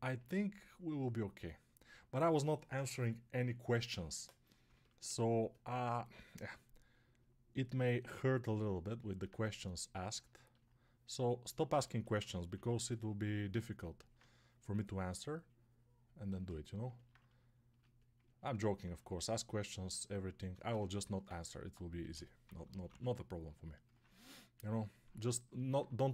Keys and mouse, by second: 11.9-26.1 alt+drag, 12.4 6, 21.9 g, 22.3 ].